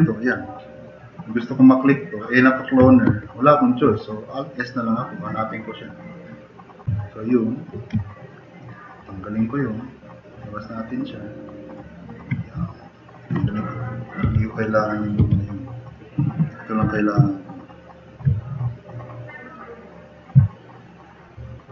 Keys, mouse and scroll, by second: 3.1 alt+s, 14.3 Delete, 15.3 Delete, 16.8 e, 17.6 Delete, 18.9-19.5 drag.